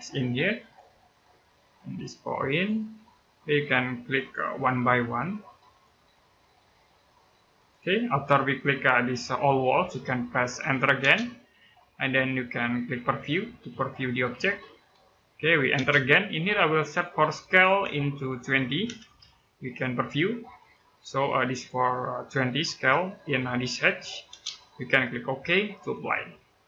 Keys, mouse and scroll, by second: 10.8 space, 13.4 click, 15.5 space, 17.0 click, 18.4 KP_2, 18.6 KP_0, 20.4 click, 24.1 space, 25.7 click.